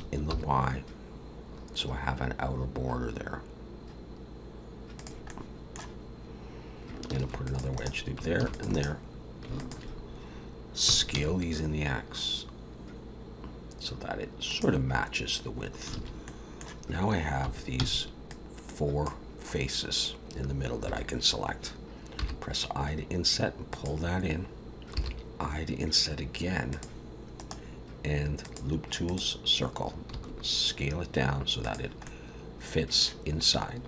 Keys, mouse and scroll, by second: 0.0 s, 5.3 middle click, 7.2 ctrl+r, 8.4 ctrl+r, 9.6 alt+shift+click, 10.8 s, 16.0 alt+a, 16.2 middle click, 17.4 3, 17.8 c, 22.2 i, 24.9 i, 27.4 right click, 30.1 s, 32.0 middle click, 33.5-33.8 scroll up 1.